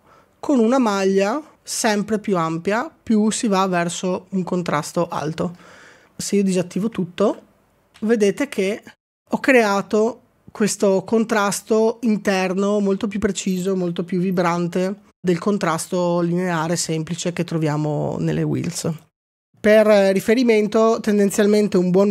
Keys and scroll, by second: 7.3 ctrl+d, 7.9 ctrl+d, 8.5 ctrl+d, 9.0 ctrl+d, 9.0 ctrl+d.